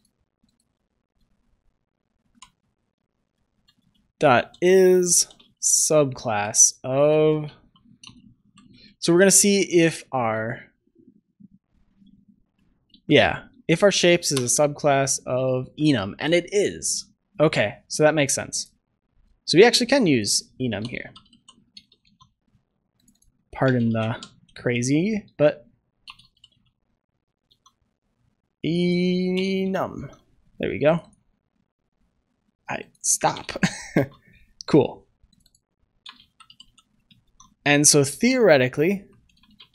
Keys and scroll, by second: 21.9 ctrl+s, 27.2 ctrl+z, 27.4 ctrl+s, 29.9 ctrl+s, 33.8 ctrl+s, 36.9 Return, 37.2 ctrl+s.